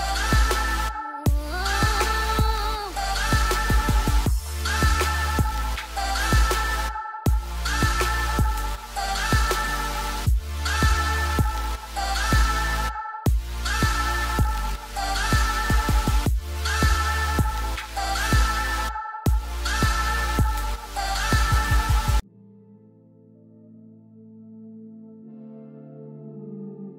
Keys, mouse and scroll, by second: 13.1 right click.